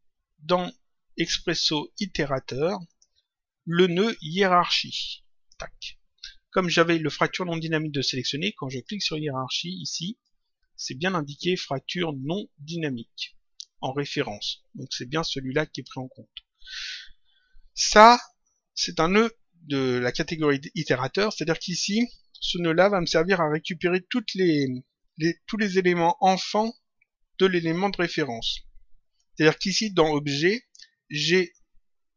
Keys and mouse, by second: 1.5 click, 2.8 click, 4.6 click, 8.7 click, 9.7 click, 15.2 click.